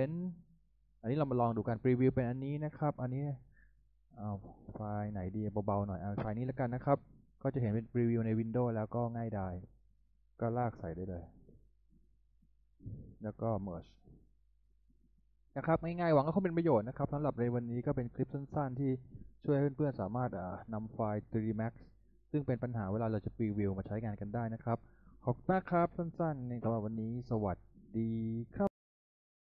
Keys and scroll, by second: 22.3 z.